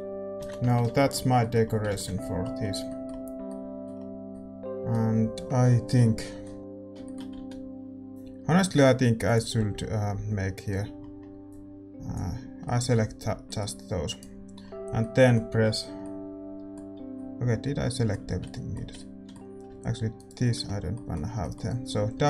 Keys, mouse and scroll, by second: 0.4 ctrl+n, 0.6 Tab, 0.7 scroll down 1, 0.9-2.1 middle drag, 2.1 ctrl+s, 6.6 ctrl+z, 7.3 z, 8.4 a, 9.2-11.4 drag, 11.4 x, 11.4 c, 14.3 scroll down 1, 14.5-22.2 middle drag, 18.2 z, 18.7 z, 20.1-22.2 right drag.